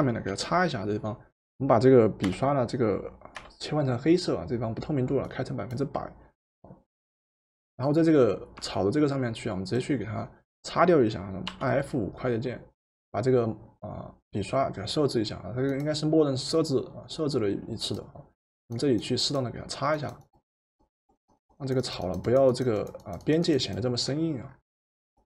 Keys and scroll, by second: 0.3 Return, 2.2 d, 3.4 x, 11.5 F5.